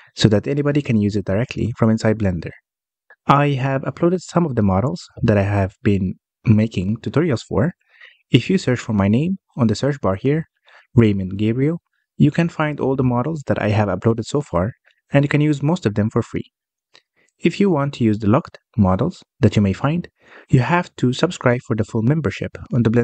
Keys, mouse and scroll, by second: 3.8 n, 4.9-11.0 drag, 11.0 BackSpace, 17.4-17.8 scroll up 1, 17.8-20.8 middle drag, 21.6-23.0 middle drag.